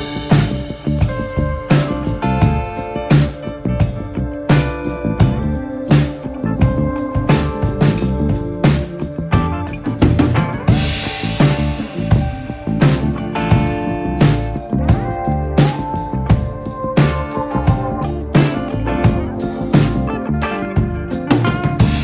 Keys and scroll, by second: 0.6 ctrl+z, 2.0 ctrl+z, 2.8 ctrl+z, 7.8 ctrl+z, 9.1 ctrl+z, 10.1 ctrl+z, 11.6 ctrl+z.